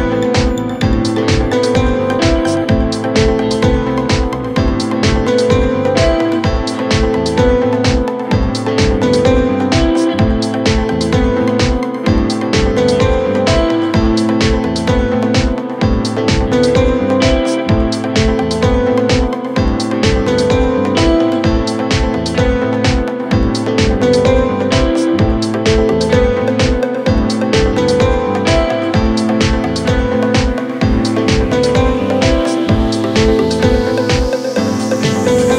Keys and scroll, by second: 2.8 ctrl+z, 18.0 F3, 25.1 Delete, 25.9 F3, 26.3 Escape.